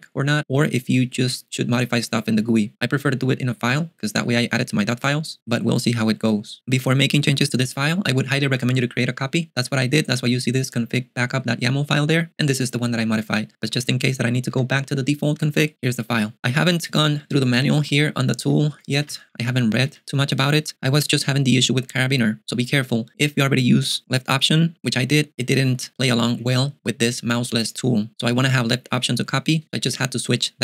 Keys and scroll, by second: 8.4 typing, 10.6 k, 12.3 j, 14.5 k, 17.6 shift+super+], 17.8 shift+super+], 18.7 shift+super+], 19.0 shift+super+[, 20.0 ctrl+alt+shift+super+6, 20.4 j.